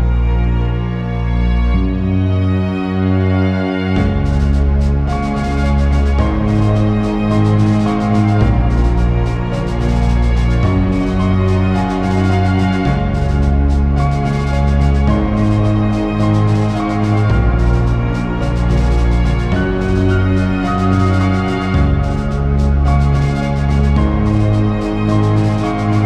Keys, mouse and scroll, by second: 4.0 right click, 8.0 alt+a, 8.5 click, 10.5 click, 11.5 alt+d, 12.0 click, 12.2 x, 12.9 click, 17.6 click, 17.7 Tab.